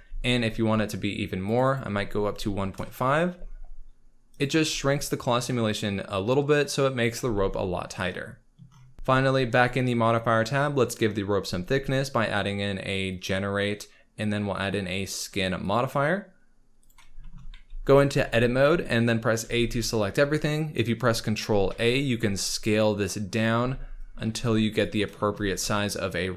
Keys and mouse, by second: 1.6-2.8 drag, 1.6 space, 4.4-7.2 drag, 7.2 space, 7.9-8.6 middle drag, 9.6 click, 10.9-15.7 drag, 16.8 click, 17.5 z, 18.2 Tab, 19.4 a, 21.6 a, 23.3 click, 23.5 z, 24.2 ctrl+a, 24.8 click.